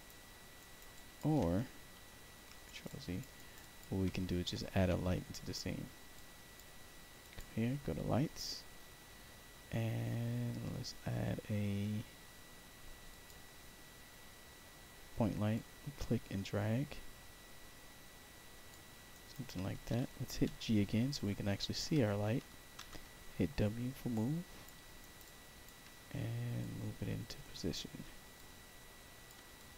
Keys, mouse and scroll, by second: 0.5 alt+right click, 0.9 alt+click, 1.9 ctrl+z, 2.6 alt+right click, 2.8 alt+click, 3.3 alt+right click, 3.5 alt+click, 6.1 click, 7.1 click, 13.0 click, 15.4-18.6 drag, 19.0 alt+right click, 20.4 g, 21.1 alt+click, 22.7 w, 24.0 click, 24.9 alt+right click, 25.1 alt+click, 26.5-27.7 drag, 28.3 click, 29.5 alt+click.